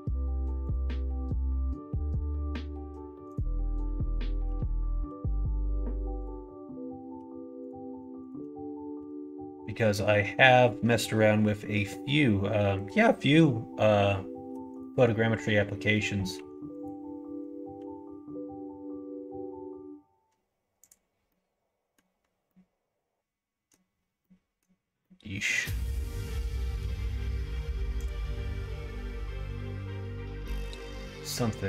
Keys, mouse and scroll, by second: 3.2 click, 5.0 g, 7.1 2, 7.6 click, 8.1 shift+click, 8.9 f, 16.3 1, 16.7 click, 17.7 g, 21.2 middle click, 22.4-23.2 scroll up 1, 23.2 middle click, 23.6 scroll down 1, 24.1 middle click, 24.5-25.0 scroll down 1, 25.0-26.8 middle drag.